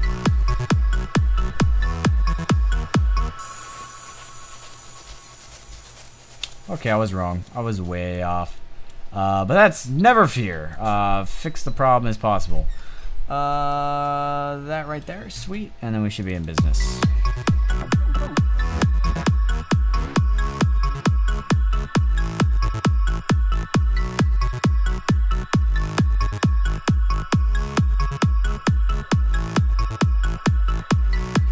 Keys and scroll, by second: 7.4 space.